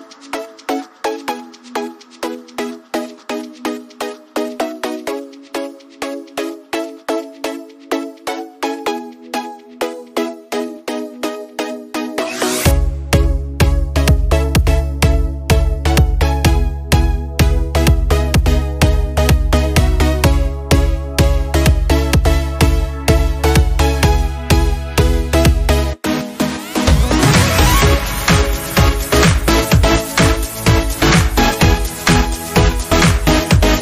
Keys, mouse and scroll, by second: 0.2 ctrl+v, 1.6-3.9 drag, 3.4 space, 4.0 space, 5.1-7.1 drag, 9.9 space, 10.1 click, 10.3 space, 11.7 alt+scroll up 1, 12.6 space, 12.7 click, 12.9 space, 22.2 click, 22.6-23.4 typing, 26.9-27.6 typing, 27.1 click, 29.0 click, 30.7 click.